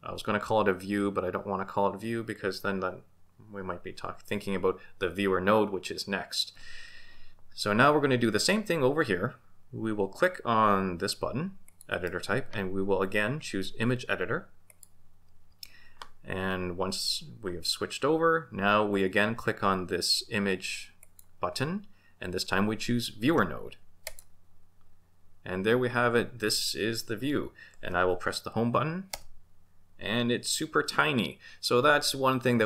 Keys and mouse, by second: 11.9-14.8 drag, 21.0-24.3 drag, 29.1 Home.